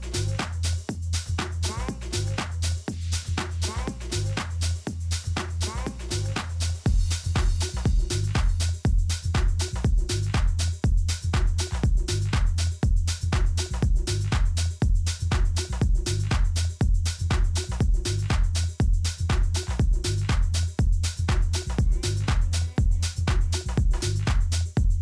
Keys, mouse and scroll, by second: 2.5-4.4 middle drag, 4.4 a, 4.7-7.3 middle drag, 5.0 z, 8.1 middle click, 8.6-9.8 middle drag, 9.8-13.1 typing, 14.4-16.3 drag, 19.2-21.3 middle drag, 21.3 a, 22.0 z, 23.0 middle click.